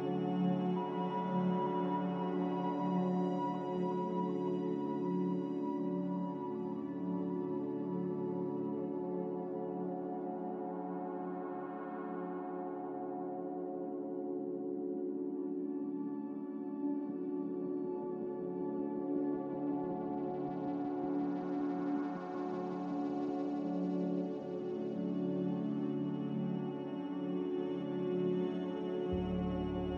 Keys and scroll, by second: 0.6-2.1 typing, 3.3-4.1 typing, 13.8 x, 15.5 n, 17.3 a, 23.0 n, 27.7 z.